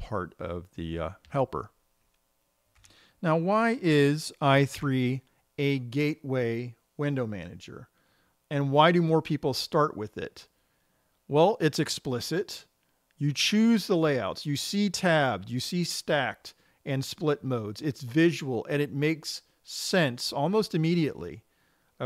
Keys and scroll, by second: 1.8 Escape.